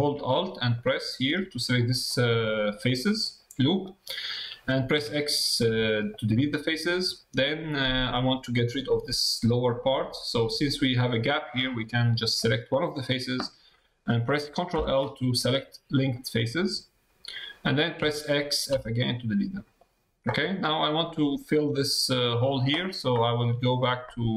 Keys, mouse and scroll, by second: 0.8 alt+click, 2.4 middle click, 3.8 middle click, 7.4 middle click, 9.9 middle click, 11.6 middle click, 12.4 click, 14.7 ctrl+l, 19.2 middle click.